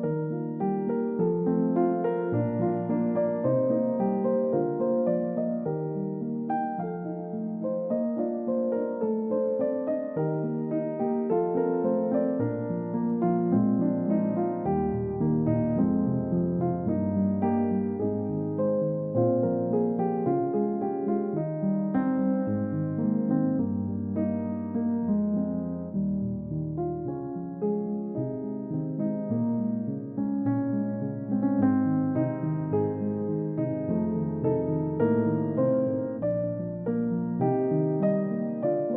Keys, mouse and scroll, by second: 0.4 h, 2.7-3.2 scroll down 1, 3.2 scroll up 1, 4.2 h, 4.5-5.0 scroll up 1, 5.0 h, 7.3 scroll down 1, 7.6 scroll up 1, 8.1 h, 11.9-12.4 scroll down 1, 12.4 typing, 17.2-17.9 typing, 24.6-26.4 scroll down 1, 26.4 middle click, 26.6-27.7 scroll up 1, 30.4 typing, 32.3-33.4 scroll down 1, 38.0 ctrl+d.